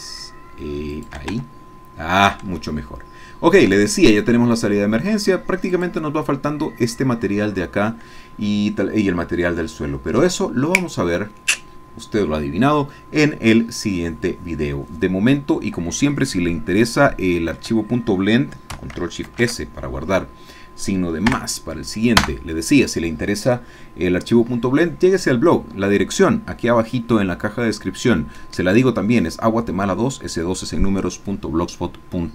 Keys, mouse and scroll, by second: 1.0 shift+click, 1.4 shift+Tab, 1.9-2.2 scroll down 2, 2.8-3.8 shift+middle drag, 3.8-4.4 shift+scroll down 1, 16.2-17.7 shift+drag, 19.3 ctrl+shift+s, 21.3 KP_Add, 22.2 KP_Enter.